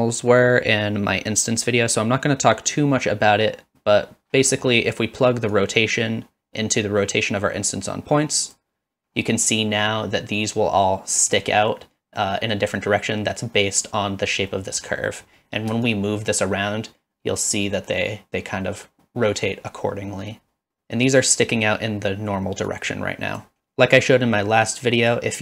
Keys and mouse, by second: 5.5-8.6 drag, 11.4-12.6 middle drag, 14.6 middle click, 15.1 middle drag, 16.0-21.3 shift+drag, 22.8-23.5 drag.